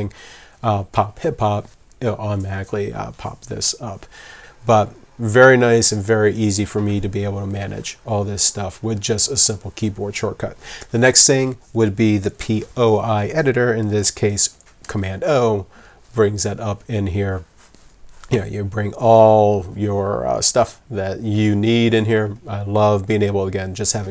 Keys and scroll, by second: 14.8 super+o.